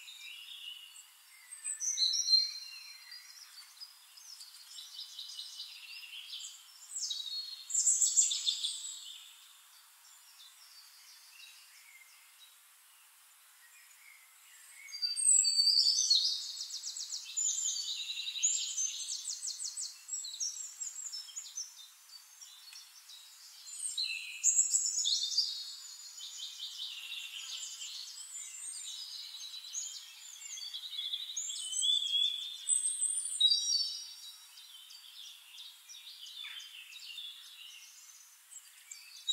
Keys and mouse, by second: 0.8 click, 1.2 click, 1.6 click, 1.9 click, 2.1 click, 2.4 click, 3.1 click, 3.9 click, 4.7 shift+click, 5.5-6.6 drag, 7.1 drag, 8.2 shift+-, 8.9 click, 9.4 click, 10.4 click, 10.6 middle click, 10.9 drag, 11.2 middle drag, 11.4-11.7 drag, 11.7 middle click, 12.1-13.0 right drag, 13.6 click, 14.1 middle click, 14.5-15.1 ctrl+drag, 15.3 ctrl+click, 16.1 click, 17.5 click, 17.9 click, 18.6 click, 19.0 click, 20.4 click, 20.9 click, 21.7 drag, 22.4 drag, 23.2 click, 23.7 click, 24.4 click, 25.0 drag, 25.9 click, 26.5 click, 27.3 drag, 28.1 drag, 30.1-33.5 drag, 34.5 click, 34.9 click, 35.6 click, 36.2 click, 37.0 ctrl+d, 37.6 shift+click.